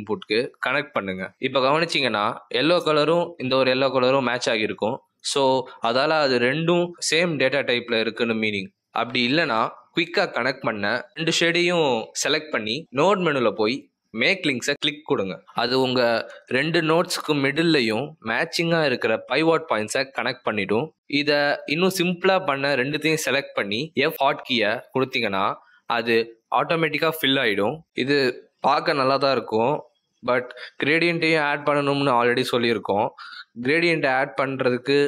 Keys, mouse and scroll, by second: 9.0 click, 10.0 click, 10.7 shift+click, 12.0 click, 20.7 click, 22.2 click, 22.8 shift+click, 23.8 f, 32.5-33.0 scroll down 7, 33.3 middle click.